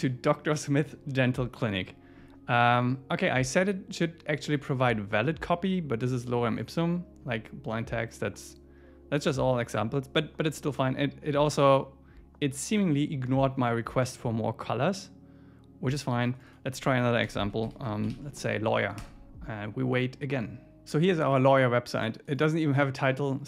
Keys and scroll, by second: 19.0 Return.